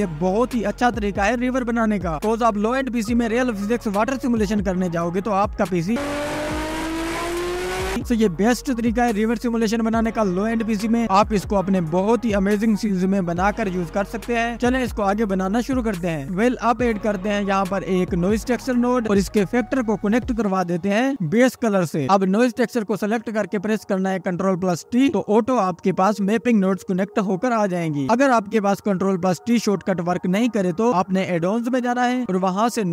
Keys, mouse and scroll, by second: 0.8 click, 3.3 ctrl+s, 4.3 click, 5.3-5.9 scroll up 1, 5.9 scroll up 1, 6.1 click, 8.0-8.8 scroll down 3, 8.8 scroll up 2, 10.5 ctrl+s, 11.6-12.6 scroll down 1, 17.2 shift+a, 19.4 scroll up 4, 19.9-22.1 drag, 22.3 click, 23.6 click, 24.0 ctrl+t, 25.1 scroll up 1, 25.4 scroll down 1, 26.9 click, 27.9-28.4 scroll up 1, 28.4 click, 29.0 click, 30.0-30.4 scroll up 6, 30.4-31.0 scroll down 10, 31.0 scroll up 1, 31.5 middle click, 31.7 scroll up 1, 32.7 click.